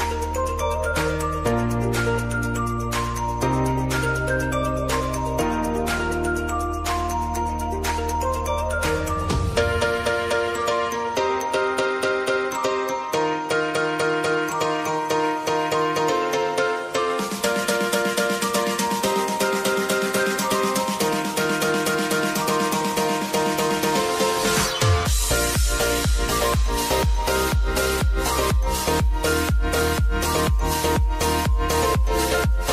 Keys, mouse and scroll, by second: 1.3 click, 6.5 ctrl+c, 7.9 click, 8.7 ctrl+click, 12.7 ctrl+v, 14.4 click, 16.2 space, 18.5-22.7 drag, 22.7 ctrl+a, 23.4 s, 24.6 click, 25.5 Page_Down, 27.4 click, 27.8 j, 28.7 click, 29.4 Return, 30.0 space, 32.2 click.